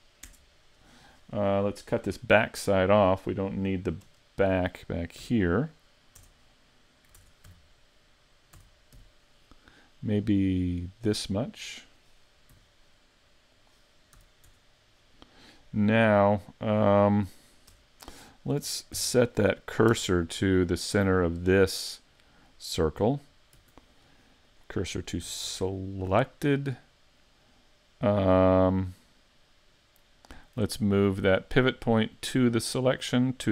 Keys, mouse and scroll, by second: 4.1 KP_3, 5.2 z, 6.2 Tab, 7.2 ctrl+Tab, 8.6 a, 8.9 b, 12.5 x, 14.2 a, 14.5 Tab, 15.0 middle click, 17.7 Tab, 18.7 ctrl+Tab, 20.8 alt+right click, 21.2 middle click, 23.6 shift+s, 25.3 a, 25.5 Tab, 25.7 middle click, 29.0 middle click, 31.4 click, 32.5 click.